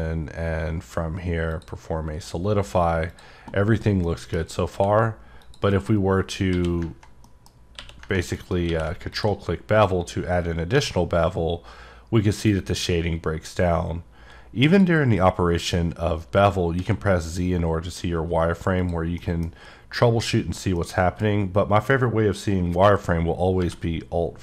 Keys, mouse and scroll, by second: 1.5 click, 3.1 click, 3.6 scroll up 2, 3.9 scroll down 1, 4.0 middle click, 5.4 click, 7.2 middle click, 8.3 right click, 9.1 click, 9.8-10.2 scroll down 3, 12.3 click, 14.7 click, 18.8 click, 19.2 middle click, 20.8 middle click.